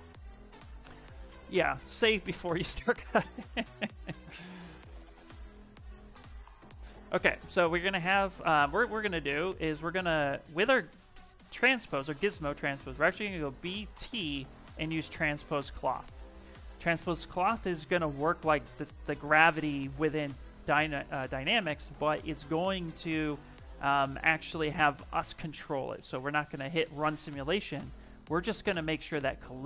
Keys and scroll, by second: 5.9 w, 7.3 q, 10.3 w, 12.6 b, 13.4 t.